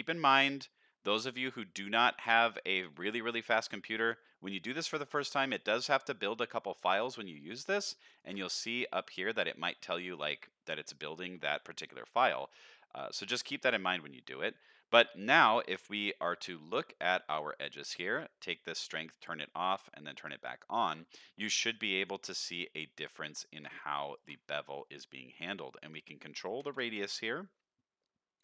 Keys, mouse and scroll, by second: 0.1 middle click, 2.1 middle drag, 2.7 shift+middle drag, 3.4 middle click, 3.9 shift+middle drag, 4.8 middle click, 5.8 middle click, 7.2 click, 7.4 middle click, 8.2 ctrl+shift+click, 11.5 middle click, 12.0 scroll up 1, 12.4 shift+middle drag, 12.9 scroll up 1, 13.2-14.2 middle drag, 15.0-15.4 scroll down 2, 15.6 middle click, 16.1 scroll up 2, 16.7 middle click, 18.4-22.0 drag, 22.5 scroll down 1, 23.0 middle click, 23.7 middle click, 24.1 ctrl+shift+click, 24.7 scroll up 2, 25.8-27.0 drag.